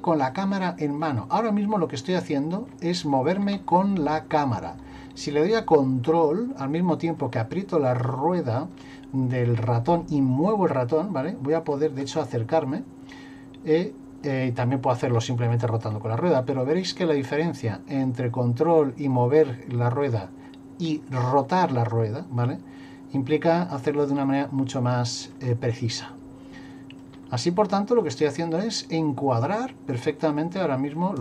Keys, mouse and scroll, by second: 0.6 shift+middle click, 1.3 middle click, 3.0 shift+middle click, 3.8 ctrl+middle click, 10.4 ctrl+middle click, 13.1-13.6 scroll down 1, 13.8-15.1 scroll up 1, 15.1 scroll up 2, 15.5-15.9 scroll down 4, 16.6 ctrl+middle click, 20.8-21.2 scroll down 2, 21.2-23.9 scroll up 3, 24.3 ctrl+middle click, 27.3 middle click.